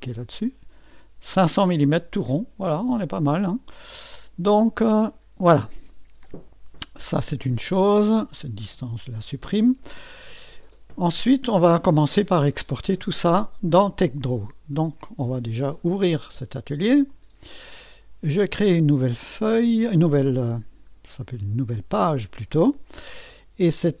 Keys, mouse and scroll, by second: 0.0 click, 4.7 click, 8.2 click, 9.0 Delete, 12.5-14.2 drag, 16.0 click, 17.1 click, 19.4 click, 21.5-24.0 scroll down 2.